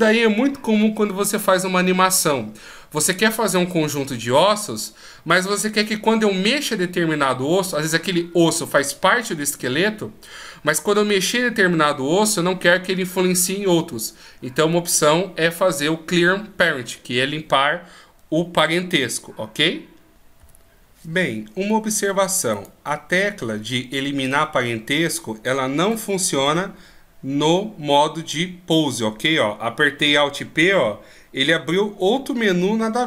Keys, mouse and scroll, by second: 22.4 right click, 26.2 alt+p, 29.8 alt+p.